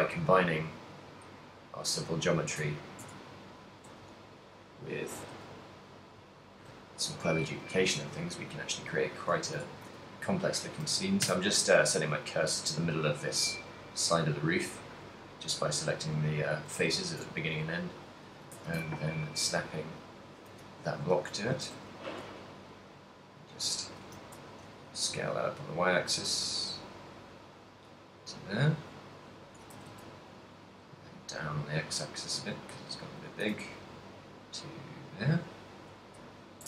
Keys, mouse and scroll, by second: 0.0 g, 2.6 click, 2.6 right click, 3.0 Tab, 3.5 middle click, 4.1 z, 5.2 right click, 5.7 z, 6.4 right click, 7.5 shift+right click, 7.9 shift+s, 9.6 Tab, 10.0 z, 11.0 z, 11.4 Tab, 12.0 middle click, 14.2 z, 14.8 z, 15.5 middle click, 16.8 z, 17.5 Tab, 17.9 right click, 18.8 shift+s, 20.7 middle click, 21.5 s, 23.8 click, 24.0 s, 27.5 click, 27.7 middle click, 29.1 middle click, 29.5 s, 33.5 click, 33.7 a, 34.0 middle click, 35.5 right click, 36.3 KP_1.